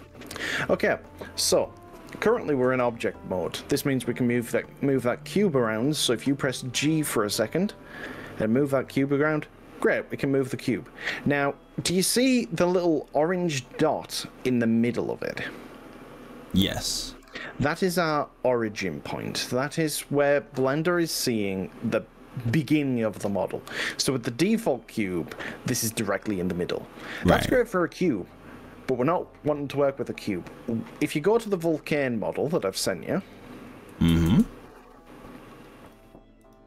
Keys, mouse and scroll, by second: 1.9-5.5 middle drag, 5.5 click, 6.3 g, 14.9 middle click, 20.3 middle click, 33.3 click, 34.1 ctrl+z.